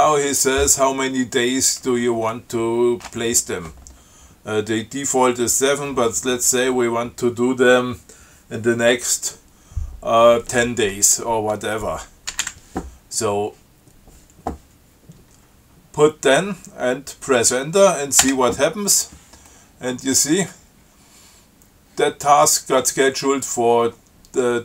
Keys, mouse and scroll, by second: 12.3-13.2 typing, 18.4 Return.